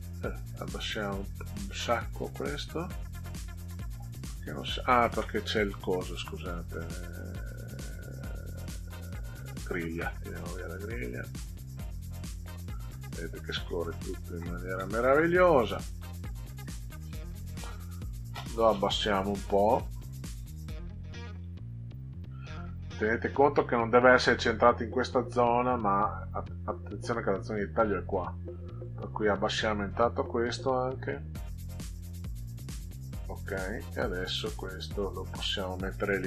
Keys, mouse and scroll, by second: 1.6-3.2 drag, 6.1 click, 9.5 click, 11.7-12.9 drag, 21.4 Down, 28.6 click, 30.6-32.3 drag, 33.4 click, 34.0 Down, 34.4 Down.